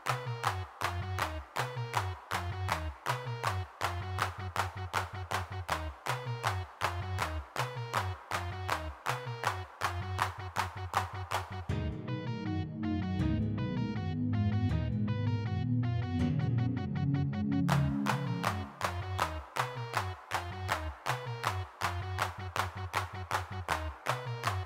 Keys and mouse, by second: 0.3 middle click, 0.9 m, 1.6 middle click, 3.6-4.8 middle drag, 5.2 3, 5.4 f, 5.8 click, 5.8 middle click, 6.7-8.0 middle drag, 8.9 alt+m, 10.2-14.7 middle drag, 14.7 click, 14.8-18.5 drag, 18.5 click, 20.0 click, 20.7 middle click, 21.6-23.0 middle drag, 24.4 middle click, 24.6 click.